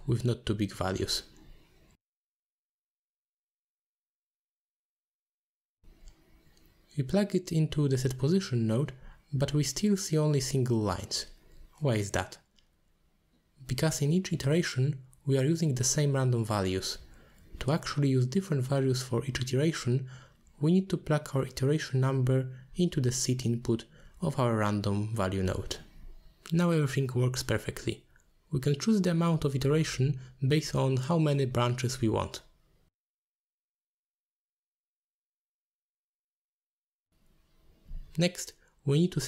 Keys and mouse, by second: 2.6 click, 3.5 middle click, 5.0-6.1 drag, 6.5 shift+click, 8.3 click, 9.1 click, 9.9 middle click, 10.6-11.4 drag, 13.0-13.8 middle drag, 14.2 middle click, 15.2 click, 15.3 click, 16.5 middle click, 17.8-20.1 drag, 20.5 middle click, 22.0 middle click, 24.2-25.7 drag, 26.6-27.7 drag, 28.7 middle drag, 29.8 middle click, 33.2 click, 33.3 middle click, 33.5 click, 33.5-35.5 typing, 33.8 click, 34.1 click, 34.4 middle click, 34.6 click, 35.0 click, 35.1 middle click, 35.4 click, 35.7 click, 36.1 click, 36.6 middle click, 37.9 middle click, 38.3 middle click, 39.0 middle drag.